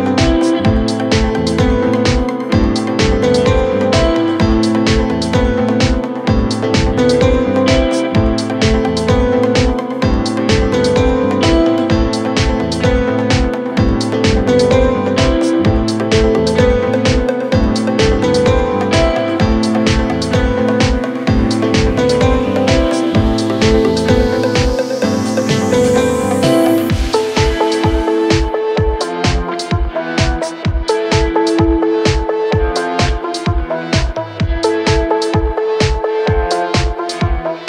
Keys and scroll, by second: 0.1 shift+F2, 0.9 Right, 7.8 Escape, 13.8 g, 17.0 Escape, 25.0 Delete, 25.9 ctrl+z, 27.2 F3, 28.7 F3, 29.7 Escape, 31.8 shift+F2, 32.0 Escape.